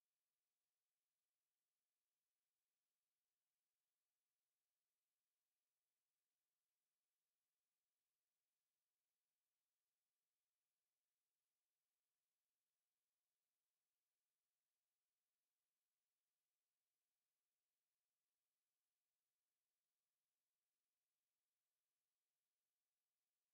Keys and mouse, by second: 0.0 alt+middle click, 0.5 alt+click, 3.5 alt+click, 5.1 alt+click, 5.6 alt+click, 6.2 click, 6.9 shift+click, 7.8 shift+click, 9.5 shift+click, 10.1 alt+middle click, 11.0 alt+click, 11.7 alt+click, 12.5 alt+click, 12.9 alt+click, 13.3 alt+click, 13.6 alt+middle click, 14.6 alt+middle click, 15.2 alt+click, 15.8 alt+middle click, 16.2 alt+click, 16.6 alt+middle click, 17.3 shift+right click, 18.7 shift+right click, 18.9 shift+right click, 19.9 alt+click, 21.1 ctrl+click.